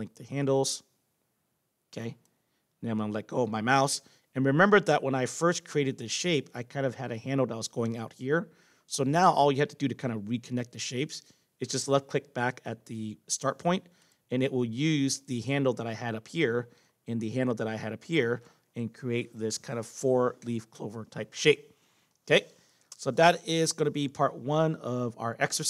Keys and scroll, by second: 22.9 Return.